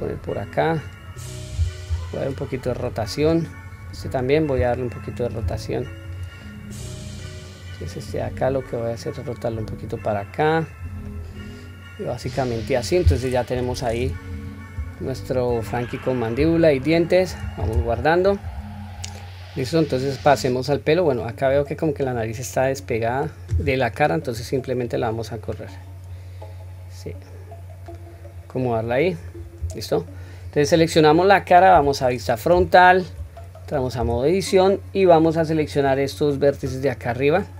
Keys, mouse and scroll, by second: 3.8 click, 5.4 r, 6.4-7.2 middle drag, 7.7 click, 8.5 click, 9.4-10.7 drag, 11.0-12.2 middle drag, 12.5 click, 12.8-13.5 scroll down 1, 13.5-14.0 scroll down 1, 13.5 KP_1, 14.3-14.7 scroll down 1, 15.0-15.4 shift+middle drag, 15.7-16.4 scroll up 3, 16.5-17.2 shift+middle drag, 17.8 ctrl+s, 19.2-21.5 middle drag, 22.0 click, 22.5-23.1 middle drag, 24.2 click, 25.5 click, 25.7-27.8 drag, 28.1-28.5 scroll down 1, 28.5-29.2 middle drag, 29.6-30.1 scroll up 1, 30.1-30.7 scroll down 2, 30.6 click, 31.7 KP_1, 32.7 shift+middle drag, 33.3-33.7 scroll up 1, 34.0 Tab.